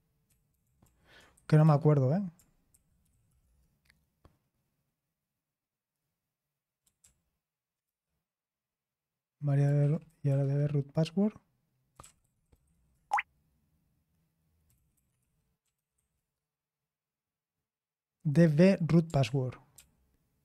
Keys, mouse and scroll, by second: 0.0-1.6 typing, 3.0 Escape, 7.0 ctrl+p, 7.8 Return, 9.5-13.2 typing, 14.4-16.4 typing, 19.2 ctrl+p, 19.7 ctrl+p.